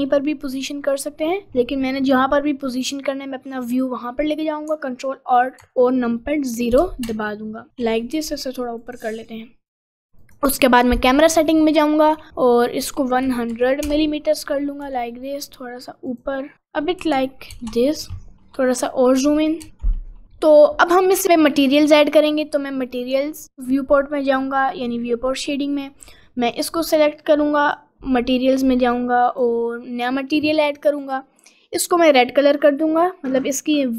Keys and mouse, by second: 0.5 middle click, 3.1 middle click, 6.7 ctrl+alt+n, 8.2 g, 10.2 click, 11.6 click, 12.9-13.9 drag, 13.5 0, 14.8 g, 16.4 middle click, 17.5 ctrl+alt+n, 18.3 middle click, 21.3 click, 26.5 click, 27.7 click, 28.9 click, 31.1 click.